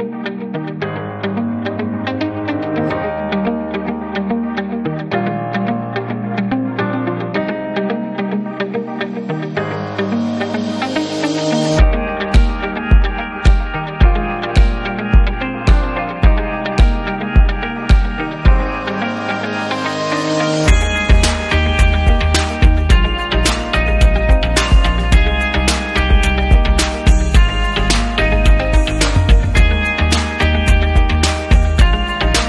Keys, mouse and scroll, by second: 1.6 click, 2.5 click, 4.4 click, 5.3 click, 8.0 click, 9.5 click, 10.2 click, 10.9 click, 11.9 click, 13.1 click, 13.8-14.6 typing, 14.8 Up, 16.0 Left, 17.5 click, 18.3 click, 19.6 click, 25.0 click, 26.8 click, 27.0 click, 27.1 double click, 28.3 double click, 29.0 click, 30.0 click.